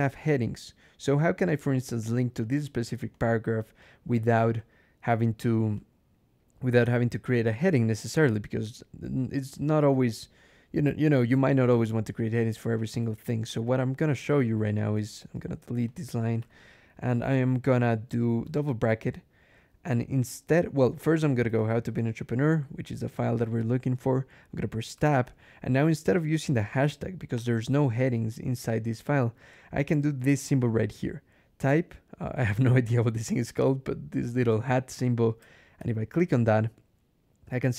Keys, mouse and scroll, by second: 0.1 click, 2.3 click, 3.7 click, 4.4 click, 5.6 click, 6.8 click, 7.4 click, 8.0 ctrl+e, 9.6 click, 12.0 click, 12.6 click, 13.3 BackSpace, 14.0 click, 14.8 Escape, 15.0 d, 15.7 click, 16.2 i, 18.3 [, 21.0-22.0 typing, 24.8 Tab, 26.4 shift+3, 27.2 BackSpace, 35.6 shift+6.